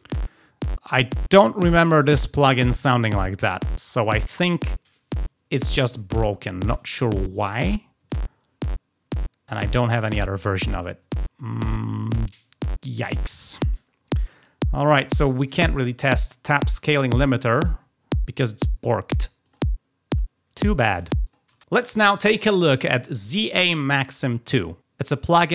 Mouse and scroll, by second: 13.3 click, 15.2 click, 19.4 click, 21.1 click.